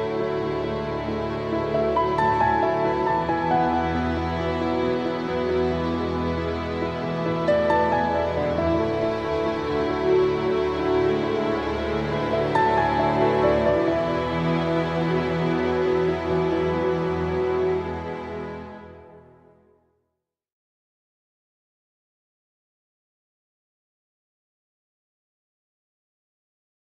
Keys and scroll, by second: 1.1 super+t.